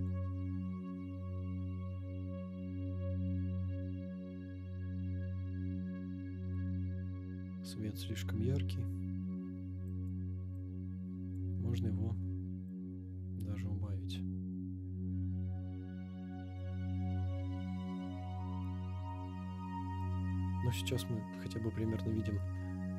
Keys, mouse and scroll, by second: 2.0-3.1 drag, 3.3 click, 6.5-8.7 drag, 9.9 click, 10.5 click, 12.7-16.9 drag, 20.0 click.